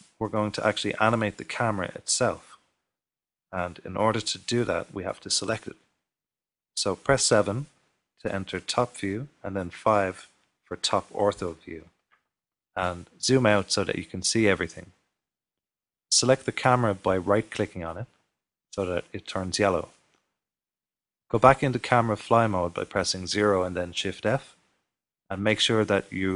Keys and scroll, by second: 10.4 typing, 12.2 typing, 14.7 typing, 20.5 typing, 22.9 typing.